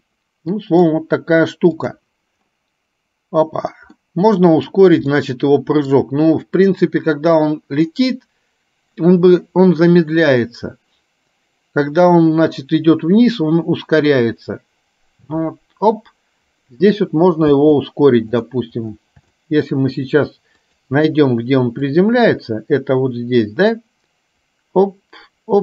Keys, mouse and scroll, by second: 1.8 click, 4.1-4.8 middle drag, 5.2-6.1 middle drag, 8.0-9.1 middle drag, 17.6 space, 18.5 click, 19.6 middle click, 20.7 click, 22.0-25.6 drag.